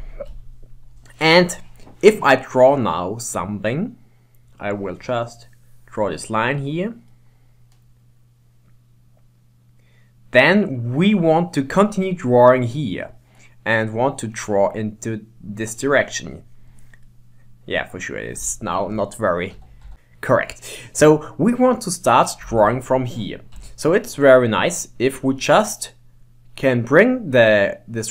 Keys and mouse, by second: 0.3 KP_1, 4.6-7.2 drag, 7.2-9.3 middle drag, 12.8 middle click, 15.6-17.1 drag, 17.1-19.7 middle drag, 19.7 ctrl+z, 19.9 ctrl+z, 20.1-21.7 middle drag, 23.6 middle click, 23.6 KP_1.